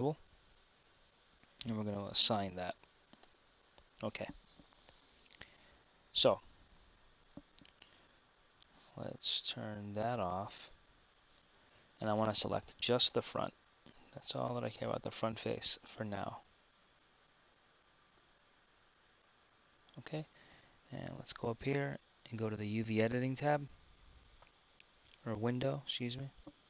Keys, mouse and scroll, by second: 11.7 a, 12.8 b, 20.8 KP_1.